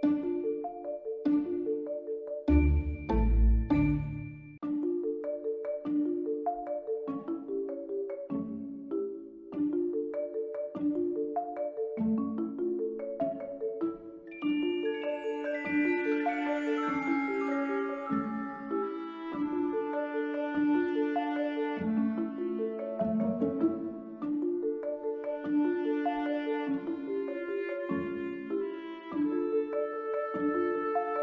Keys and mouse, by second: 0.0-1.3 drag, 1.5 Tab, 1.9 ctrl+r, 2.7 click, 3.3 ctrl+r, 4.2 click, 4.6 3, 5.0 1, 5.5 b, 6.9 s, 9.0 b, 10.1 click, 11.1 Tab, 11.6 click, 14.3 shift+Return, 14.3 shift+d, 15.4-16.2 drag, 16.7-17.1 drag, 17.9 Tab, 18.4 b, 19.1 s, 19.3 z, 20.2 click, 20.5 s, 21.5 click, 22.0 b, 23.0-23.8 drag, 24.0 Tab, 24.6 s, 25.3 click, 25.8-26.7 drag, 27.2-27.9 drag, 28.4 r, 28.6 x, 29.8 click, 30.5-31.2 drag.